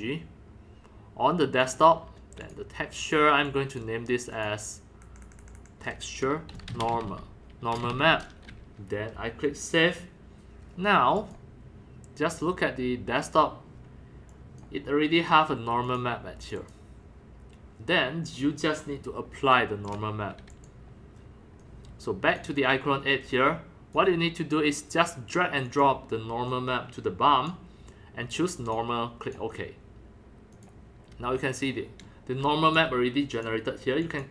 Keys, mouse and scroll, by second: 1.6 click, 2.4 click, 3.0 click, 3.5 click, 4.3 click, 5.1-8.6 typing, 9.5 click, 9.6-11.0 drag, 11.2 click, 13.2 click, 13.3 scroll up 1, 14.3 click, 15.2 click, 15.5 middle drag, 15.8 click, 16.4 click, 16.5 click, 18.3 click, 19.9 click, 20.5 click, 21.6 click, 23.2-25.8 drag, 26.5 click, 28.6 click, 29.2 click, 30.6 click, 31.0 scroll up 2, 31.3 scroll down 2, 31.8-32.9 typing, 32.0 click, 33.3-34.3 drag.